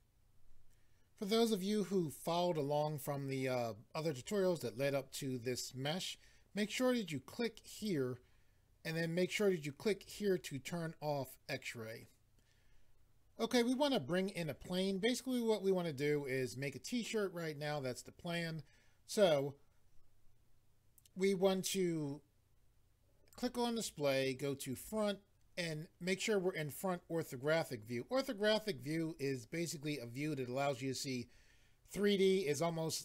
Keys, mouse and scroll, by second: 7.7 click, 10.0 click, 23.3 click, 24.7 click.